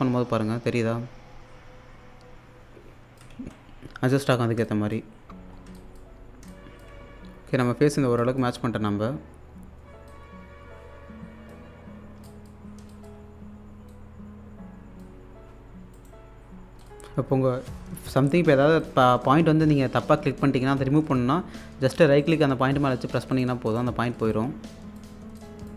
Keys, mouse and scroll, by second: 3.3 ctrl+z, 3.9-4.6 scroll down 1, 4.7 alt+click, 5.3 scroll up 1, 5.5 scroll down 1, 5.8 alt+click, 7.0-7.6 scroll up 1, 7.6 click, 8.0 scroll down 1, 8.2 alt+click, 10.1-11.9 drag, 11.9 scroll down 1, 12.3 alt+click, 13.2-13.9 scroll up 1, 15.9 right click, 16.8 click, 17.5-18.3 scroll up 1, 18.9 click, 22.2 right click, 24.3 click.